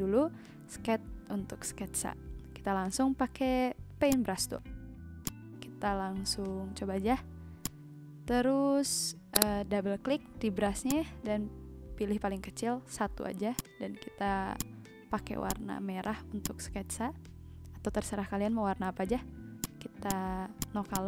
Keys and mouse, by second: 0.4 s, 0.6 e, 0.8 t, 1.2 Return, 4.6 b, 5.8 ctrl+z, 7.6 click, 13.5 click, 14.2 z, 14.5 click, 15.4 click, 16.4 click, 17.1 ctrl+z, 19.5 click.